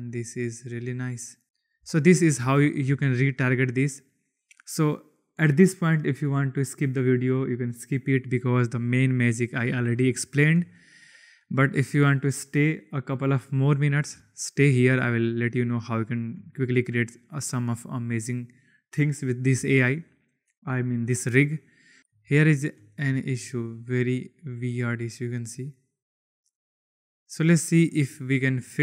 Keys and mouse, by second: 1.7 n, 2.5 shift+drag, 9.9-10.5 shift+middle drag, 11.3-13.9 drag, 14.1-14.6 shift+middle drag, 15.7 shift+middle click, 17.9 right click, 22.0 click, 22.4-22.7 shift+right drag, 23.0 click, 24.3-28.8 drag.